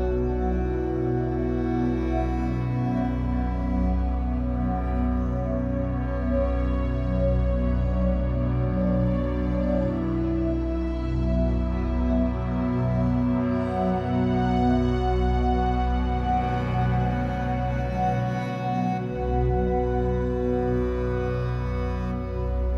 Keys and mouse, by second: 1.0 click, 2.5 g, 3.3 click, 4.1 click, 5.0 click, 5.3 typing, 7.1 typing, 8.4 click, 9.8 typing, 11.2 click, 11.8 typing, 14.3 typing, 14.9 click, 15.3-17.5 drag, 15.5 typing, 17.0 typing, 18.2 typing, 19.0 click, 20.5-22.7 alt+drag.